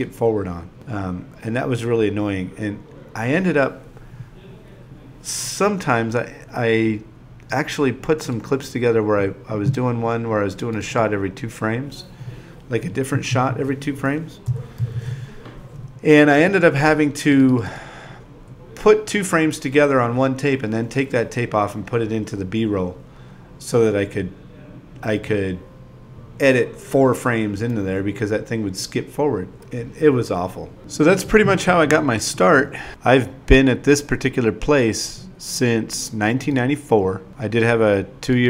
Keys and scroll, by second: 0.0-1.6 typing, 3.5 0, 3.8 ,, 5.0 super+v, 6.2-8.6 typing, 9.8 2, 10.3 i, 11.5 super+v, 13.4 shift+a, 13.7 i, 14.7 9, 16.0 shift+e, 18.9-23.6 typing, 25.0-28.6 typing, 30.5 n.